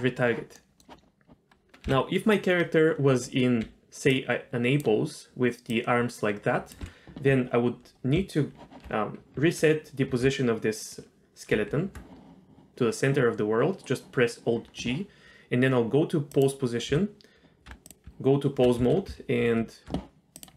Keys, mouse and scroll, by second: 0.5 middle click, 1.8 KP_1, 2.6-3.0 scroll up 2, 3.6 d, 4.1 click, 4.8-5.7 d, 5.7-6.7 drag, 6.7 d, 7.5-7.8 scroll down 2, 7.8 scroll up 1, 11.5 alt+g, 16.3 click, 16.9 a, 17.6 Tab, 17.8 click, 18.0 Tab, 18.8 a, 19.4 alt+r, 20.3-20.5 drag.